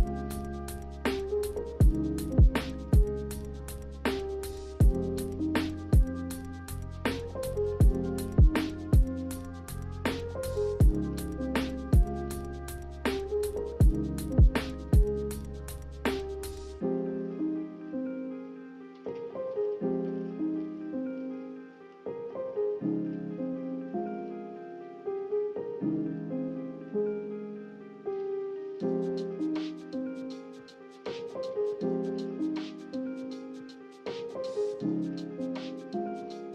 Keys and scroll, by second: 22.0 z.